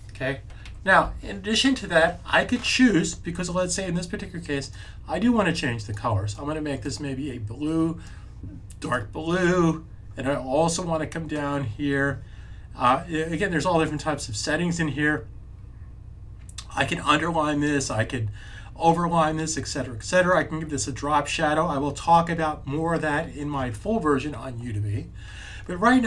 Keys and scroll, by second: 0.9 super+s.